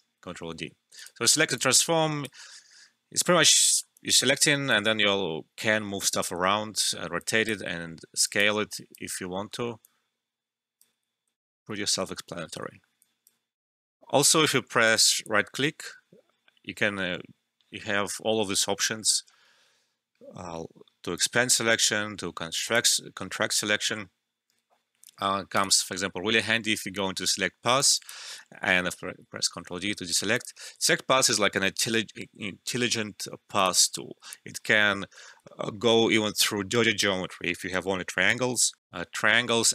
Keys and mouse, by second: 0.9-3.6 drag, 3.6 alt+middle click, 3.9-6.3 alt+drag, 6.3 ctrl+z, 7.2 click, 9.8 click, 10.9 ctrl+z, 12.2 ctrl+z, 12.7 alt+middle click, 13.0 alt+click, 13.9 alt+F12, 14.8 right click, 16.9 typing, 21.1 click, 21.7 right click, 22.6 click, 25.5 click, 27.6 alt+right click, 27.9 alt+click, 28.3-28.7 typing, 28.5 alt+middle click, 28.9 ctrl+d, 29.7 alt+middle click, 30.3 click, 32.8 typing, 33.6 click, 38.8 click.